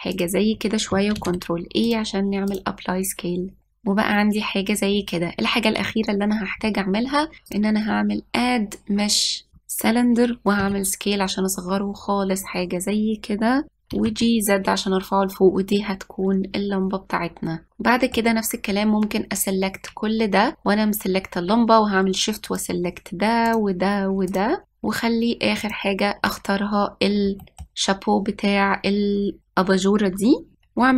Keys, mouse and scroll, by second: 1.9 ctrl+a, 3.2 click, 3.7-4.3 scroll up 1, 4.3-5.3 scroll up 3, 5.7-6.3 scroll down 1, 8.2-9.6 drag, 11.3 s, 14.6 g, 23.2 shift+click, 24.2 shift+click, 26.3 shift+click, 27.6-29.9 middle drag.